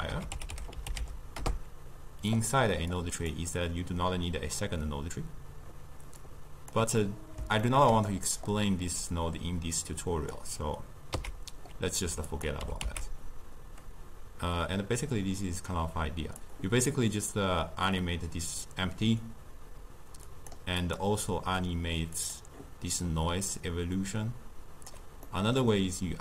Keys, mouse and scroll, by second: 3.0-6.0 drag, 6.3 click, 7.1-8.5 middle drag, 8.5-11.2 drag, 11.2 x, 12.4 click, 12.7 g, 20.3 click, 20.9 click, 22.2 click, 23.6-25.4 drag, 25.4-26.2 middle drag.